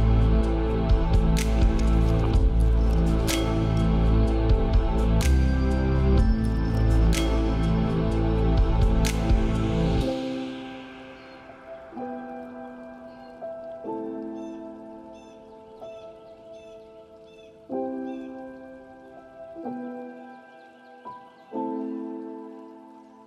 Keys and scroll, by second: 2.8 ctrl+z.